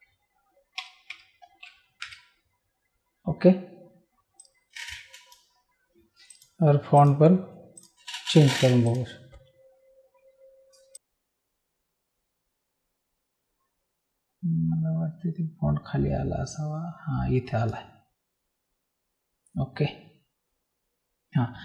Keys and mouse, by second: 0.7 BackSpace, 2.0 Return, 2.0 KP_Enter, 4.4 click, 6.3 click, 8.8 click.